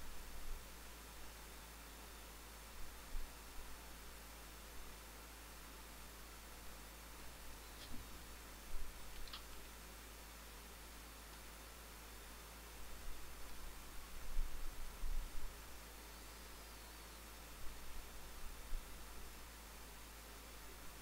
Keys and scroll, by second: 7.1 space.